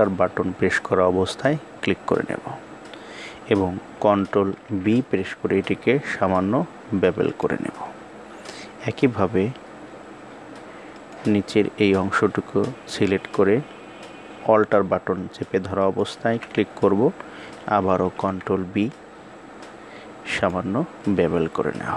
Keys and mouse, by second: 4.2 ctrl+b, 10.6 click, 15.3 alt+click, 17.7 ctrl+b.